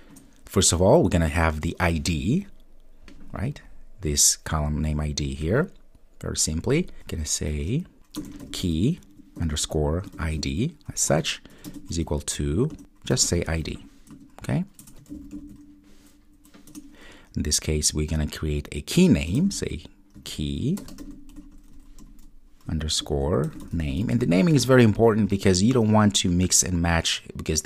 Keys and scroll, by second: 0.2 Return, 4.2 Return, 16.7 Return, 20.6 Return.